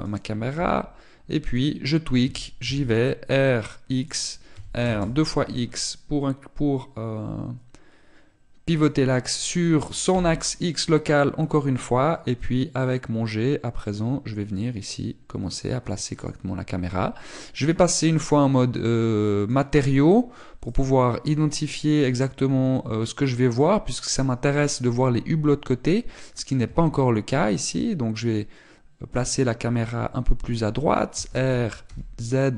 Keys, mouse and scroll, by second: 0.9 click, 1.4 g, 2.3 click, 3.0 r, 4.8 click, 5.3 r, 9.6 click, 10.9 g, 17.0 click, 18.4 click, 27.4 g, 30.0 click, 31.9 r.